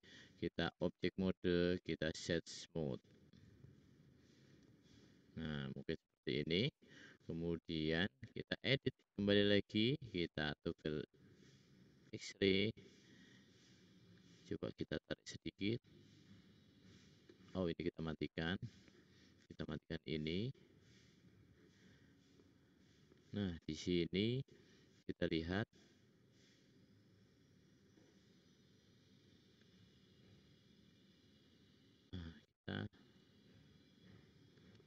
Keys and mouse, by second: 1.2 right click, 2.2-3.3 middle drag, 3.3 drag, 5.6 `, 7.9 click, 7.9 middle click, 7.9 right click, 8.7 middle click, 21.0 middle click, 22.2 middle click, 22.5 middle click, 26.5 click, 27.8-30.3 drag, 32.2 middle click.